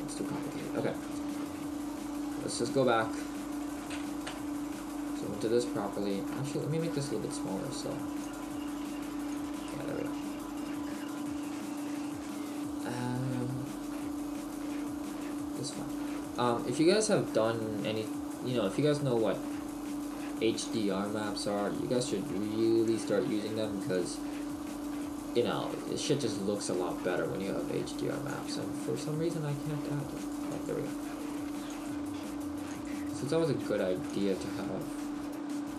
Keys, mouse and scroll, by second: 0.9-1.5 scroll down 2, 2.7 click, 3.1-3.4 scroll down 1, 3.6 right click, 4.3 KP_Decimal, 4.8 middle click, 5.6 right click, 6.9 right click, 8.3 click, 8.3 s, 8.9 s, 9.5 click, 9.7 middle click, 10.4-11.1 scroll up 4, 11.2 scroll down 1, 11.4-11.7 scroll down 1, 12.7 right click, 16.3 click, 20.7 click, 24.0 click, 27.1-28.3 scroll down 1, 28.3 click, 30.3 click.